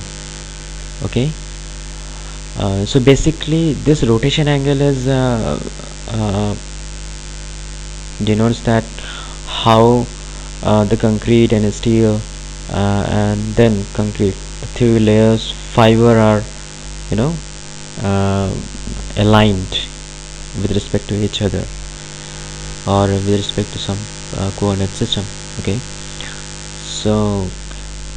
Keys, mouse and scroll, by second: 22.5 click.